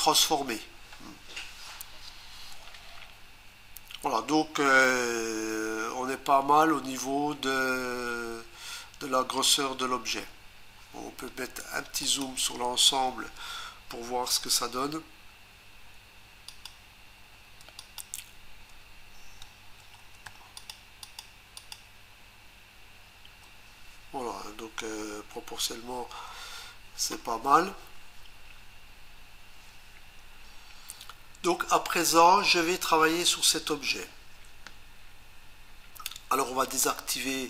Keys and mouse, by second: 12.0 click, 16.5 shift+click, 17.8 click, 20.5 ctrl+click, 21.2 ctrl+double click, 21.6 ctrl+click.